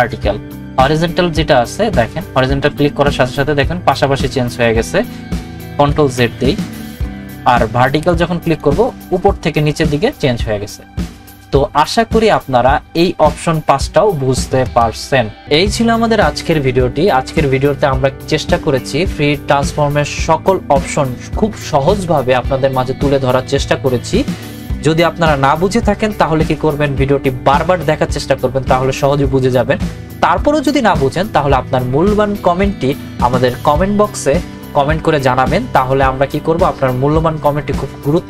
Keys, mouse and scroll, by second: 2.2 click, 6.1 ctrl+z, 8.4 click, 11.9 right click.